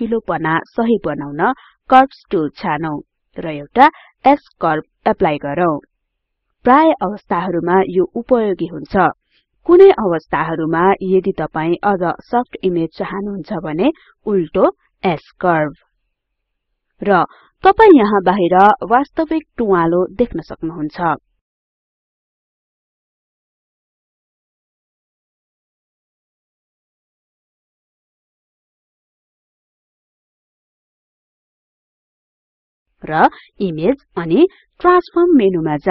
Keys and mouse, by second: 4.5 click, 9.0 click, 12.0-21.0 drag, 21.5-24.0 drag, 28.5-30.0 drag, 31.5 click.